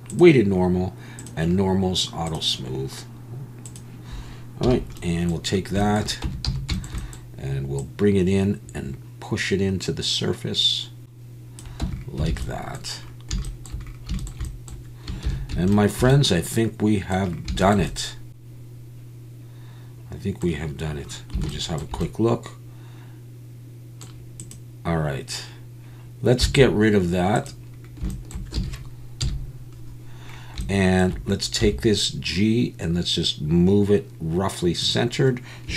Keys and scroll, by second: 6.2 Tab, 6.5 a, 11.8 Tab, 12.3 alt+a, 15.3 ctrl+s, 26.4 x, 28.6 a, 29.2 KP_1, 31.6 g.